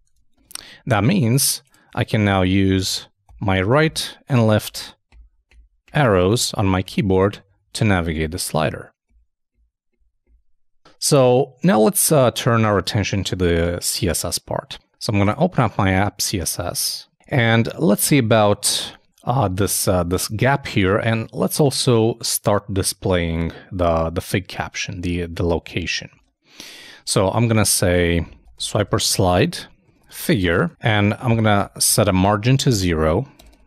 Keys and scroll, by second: 0.1 super+e, 0.3 super+Tab, 19.1 super+Tab, 26.2 super+Tab, 31.9-32.7 typing.